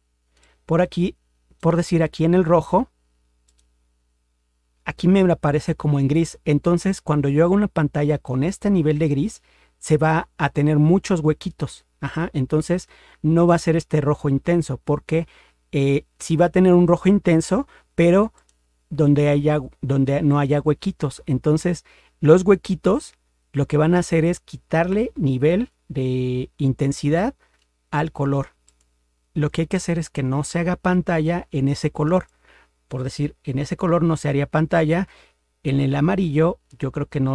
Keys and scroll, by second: 33.5 ctrl+0, 35.7 ctrl+=.